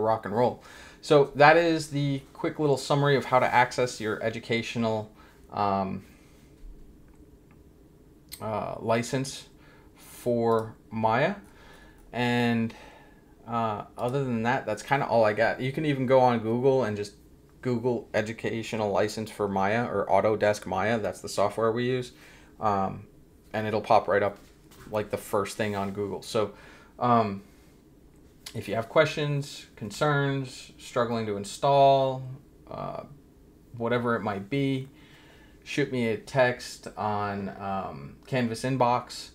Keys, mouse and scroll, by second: 10.5 click, 13.9 click.